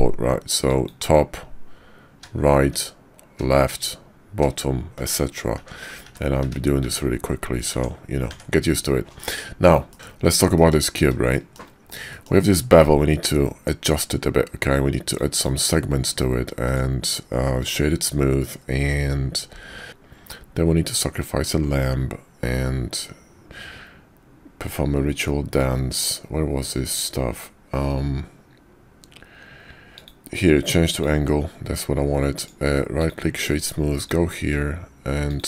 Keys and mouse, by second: 1.4 `, 2.7 `, 3.8 `, 5.6 `, 6.0 `, 6.4 `, 6.8 `, 7.7 Tab, 8.3 Tab, 9.2 drag, 9.9 middle click, 10.5 middle click, 11.3 shift+middle click, 12.1 middle click, 15.0 click, 15.3 click, 16.7 click, 20.3-21.5 middle drag, 30.0-31.0 drag, 32.4 click, 33.9 click, 35.3 click.